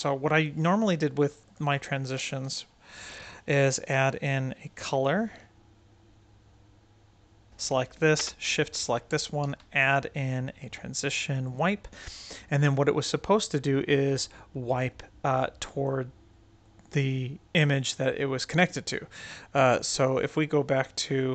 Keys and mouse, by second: 1.4 drag, 1.7-2.1 right drag, 2.8 shift+a, 5.7 middle click, 6.4 middle drag, 7.3 drag, 8.5 shift+click, 9.3 shift+a, 12.0-15.8 drag, 16.6-17.5 right drag, 17.8 click.